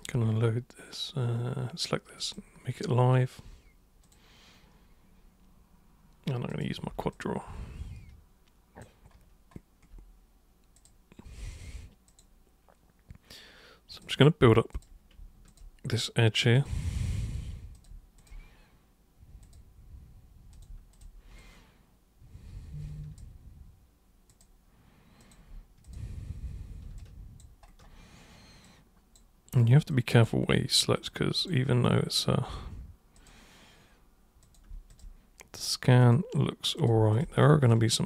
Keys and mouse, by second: 2.2 super+click, 4.0 super+click, 6.5 super+click, 7.1-8.8 alt+super+drag, 10.8 super+click, 12.1 super+click, 13.9 super+click, 14.7 super+click, 15.5 shift+super+click, 16.6 super+click, 17.8 super+click, 18.2 shift+super+click, 19.5 super+click, 20.6 super+click, 20.9 shift+super+click, 21.4-23.2 alt+super+drag, 24.4 super+click, 25.2 super+click, 25.9 shift+super+click, 27.0 alt+super+click, 28.7 super+click, 29.9 super+click, 31.1 super+click, 33.2 super+click, 34.5 super+click, 35.0 shift+super+click, 36.0 super+click, 36.8 super+click, 37.1 shift+super+click, 37.7 alt+super+click.